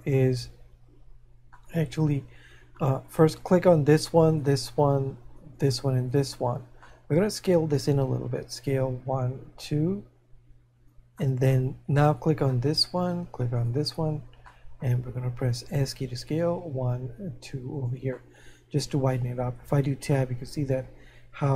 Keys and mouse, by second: 1.6 middle click, 4.3 right click, 6.1 shift+right click, 13.6 right click, 18.1 middle click, 20.8 middle click.